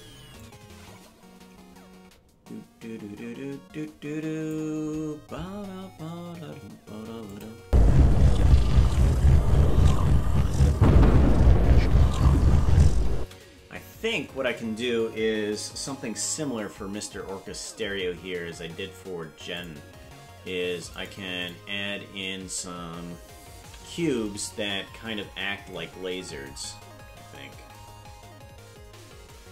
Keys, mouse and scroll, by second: 0.4-4.6 drag, 7.3 click, 7.6 space, 13.2 space, 19.5 click, 20.4 ctrl+Tab, 21.4 click, 23.6 KP_Decimal, 26.6-27.2 scroll down 7, 27.8-28.2 scroll down 4.